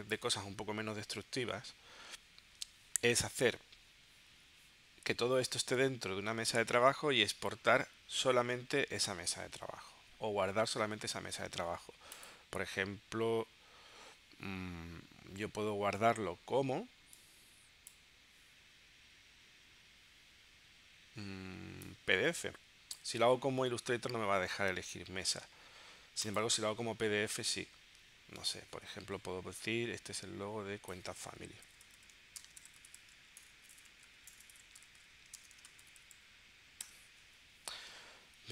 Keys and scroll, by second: 31.4-36.9 typing.